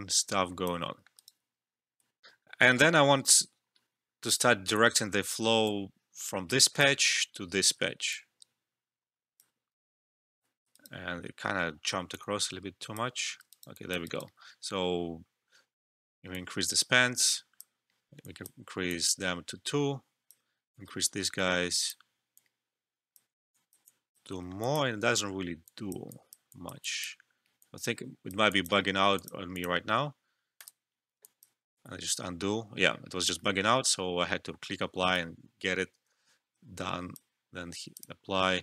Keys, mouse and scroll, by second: 0.9 alt+middle click, 1.2 alt+right click, 2.2 alt+F12, 5.6-9.8 drag, 9.8 alt+middle click, 10.2 ctrl+z, 10.7 alt+right click, 12.1-13.5 drag, 13.5 alt+right click, 13.7 alt+click, 14.0 alt+right click, 16.3-24.3 drag, 24.4 alt+middle click, 24.6 alt+click, 24.9 alt+middle click, 25.6 click, 31.2 alt+click, 31.7 ctrl+z, 33.2-38.6 drag.